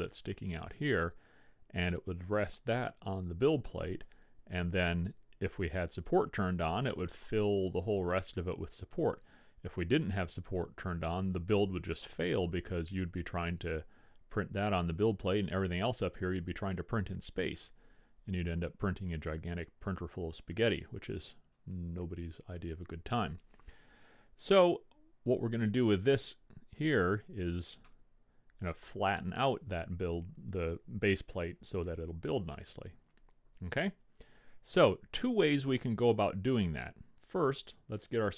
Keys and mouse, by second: 19.1-23.0 middle drag, 25.5-28.1 middle drag, 32.0 KP_1, 32.9 KP_5, 33.7 KP_5.